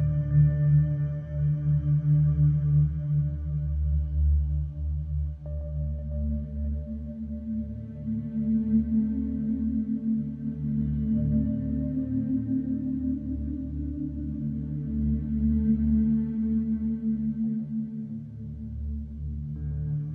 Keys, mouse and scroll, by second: 0.8 click, 2.5 click, 3.3 click, 15.2-16.2 scroll, 16.9-17.3 scroll, 18.7 click, 19.3 click.